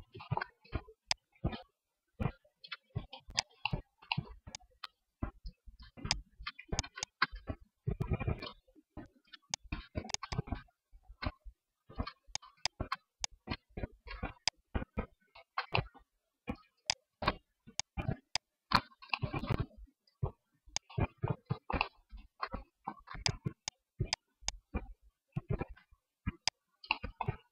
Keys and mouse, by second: 0.2 Tab, 2.2 Tab, 4.6 click, 4.9 Tab, 6.0 Tab, 7.2 Tab, 8.5 Tab, 8.8 Tab, 9.3 Tab, 10.7 Tab, 11.6 Tab, 13.0 Tab, 13.6 ctrl+s, 16.1 Tab, 16.7 ctrl+l, 17.5 Tab, 18.2 KP_1, 19.1 r, 20.4 click.